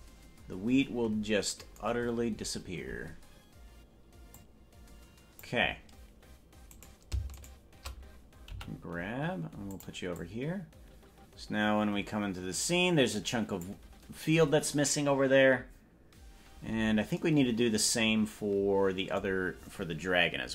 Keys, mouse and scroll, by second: 0.8-1.4 scroll up 14, 4.4-5.6 drag, 6.8 right click, 8.6 g, 10.2-13.7 drag.